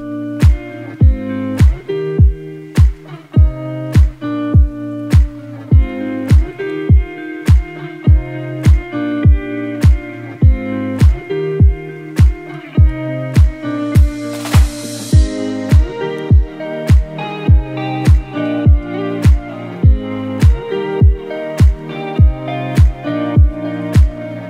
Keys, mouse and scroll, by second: 10.3-10.9 scroll up 1, 10.9-13.3 typing, 11.0 click, 11.4 click, 11.7 click, 12.3 click, 12.7 click, 13.1 click, 13.5-24.4 drag.